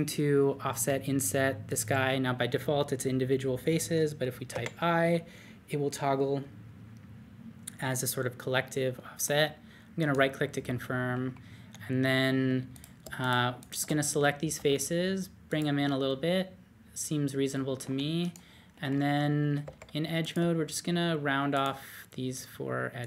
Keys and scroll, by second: 0.7 o, 4.5 i, 10.0-10.7 typing, 14.5 d, 18.7 alt+z, 19.6 2.